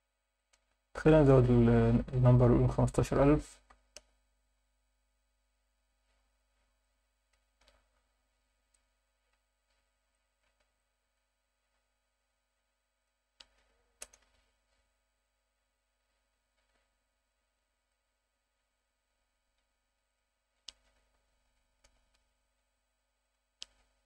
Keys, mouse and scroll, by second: 0.3-4.1 drag, 3.2 0, 6.8-7.3 alt+shift+middle drag, 8.7-9.1 alt+shift+middle drag, 9.3 scroll up 1, 10.1 alt+shift+middle drag, 10.8-11.2 ctrl+alt+middle drag, 13.0-14.2 drag, 17.0 click, 17.9 click, 20.1-22.0 drag, 23.2-24.0 drag.